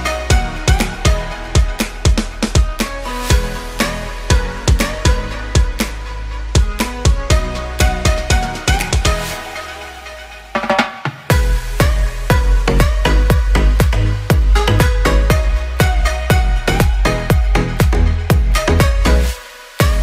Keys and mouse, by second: 5.3-7.4 drag, 8.6 ctrl+j, 10.1 click, 11.0 Tab, 11.3 click, 12.5 ctrl+l, 12.9 1, 14.4 shift+click, 15.3 shift+click, 16.1 shift+click, 17.4 g.